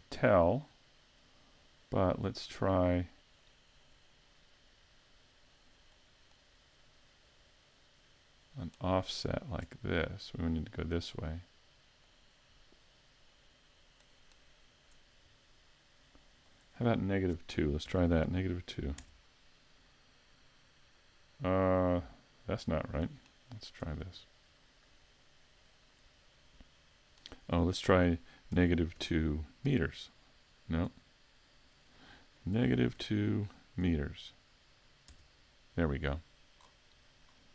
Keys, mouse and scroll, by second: 2.1 click, 3.4 click, 4.0 click, 5.8 click, 12.0 click, 13.2 click, 16.5 click, 22.6 click, 25.7 click, 28.6 -, 29.0 2, 29.7 m, 31.5 click, 36.6 scroll down 5, 37.3-37.5 scroll up 2.